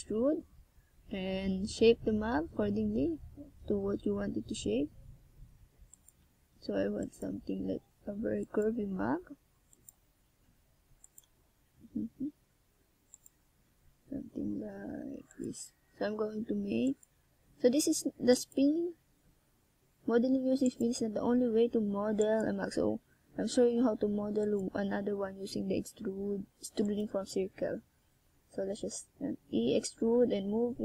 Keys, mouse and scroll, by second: 6.2 s, 8.9 s, 10.2 click, 12.0 e, 14.8 click, 16.4 r, 17.2 click, 18.0 s, 20.8 click, 21.4 g, 22.2 click, 23.1 r, 24.2 click, 24.7 e, 25.4 click, 25.9 g, 26.8 click, 27.1 r, 27.7 click, 28.0 g, 28.6 click, 29.0 e, 29.7 click, 30.2 g.